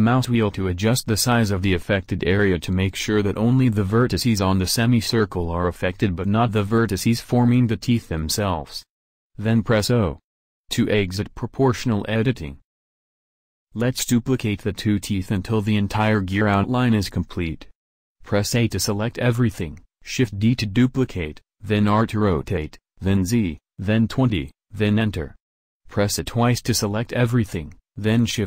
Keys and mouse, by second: 9.5 o, 13.2 a, 13.9 a, 18.6 shift+d, 24.0 a, 24.6 a, 26.6 shift+d.